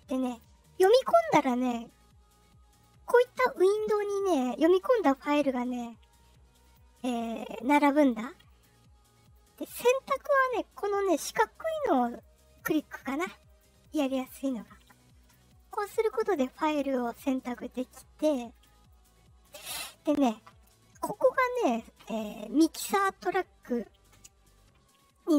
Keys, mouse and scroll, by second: 0.3 click, 2.8-4.3 drag, 6.6 click, 7.1 click, 7.5 click, 7.9 click, 8.4 click, 9.2 click, 10.0 click, 11.1 click, 11.6 click, 12.0 click, 12.4 click, 12.7 click, 13.1 click, 13.4 click, 13.8 click, 14.1 click, 14.4 click, 14.7 click, 15.1 click, 15.5 click, 15.9 click, 16.2 click, 16.6 click, 17.0 click, 17.3 click, 17.7 click, 18.1 click, 18.5 click, 18.8 click.